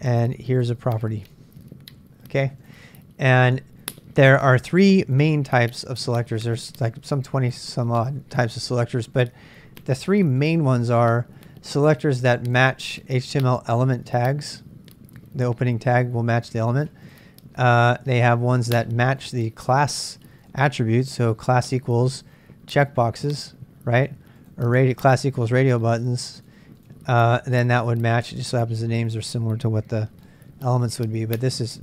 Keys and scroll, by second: 30.3-31.8 typing.